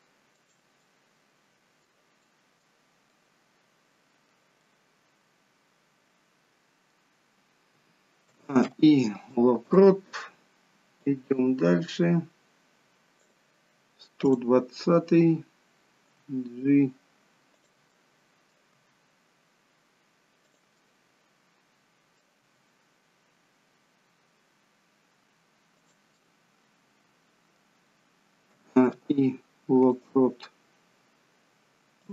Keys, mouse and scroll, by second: 0.8 middle click, 2.2 middle click, 4.5 middle click, 8.2 a, 8.6 i, 11.1 click, 14.1 click, 16.0 g, 17.8 middle click, 18.6 g, 20.7 middle click, 22.5 g, 26.0 middle click, 28.5 a, 28.8 i.